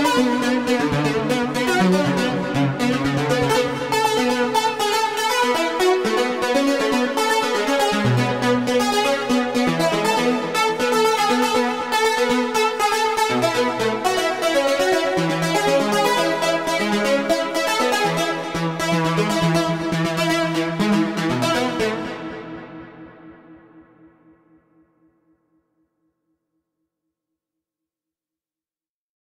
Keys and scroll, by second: 0.5 super+a, 3.3 shift+r, 13.1 alt+r, 21.7 space.